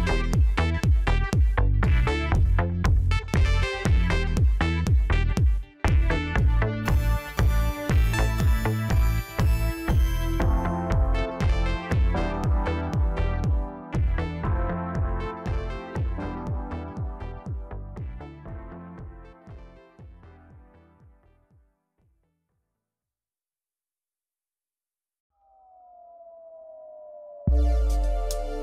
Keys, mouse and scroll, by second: 0.7-1.1 scroll up 1, 1.1 Tab, 1.5-2.0 scroll up 1, 2.0-3.3 middle drag, 3.3 click, 4.3 click, 5.3 shift+click, 5.5 shift+click, 6.6 shift+click, 6.8 shift+click, 8.0 middle click, 9.0 shift+click, 9.7-11.1 middle drag, 11.1 shift+click, 11.4 shift+click, 11.9-13.5 middle drag, 13.5 scroll down 2, 13.8-14.9 middle drag, 14.9-16.1 scroll up 1, 16.1 ctrl+i, 16.9-18.1 scroll up 2, 18.1-21.2 drag, 21.5-21.9 scroll up 2, 21.9 scroll down 2, 22.2-25.3 middle drag, 26.1 KP_1, 26.8-28.1 scroll up 1, 28.1 click.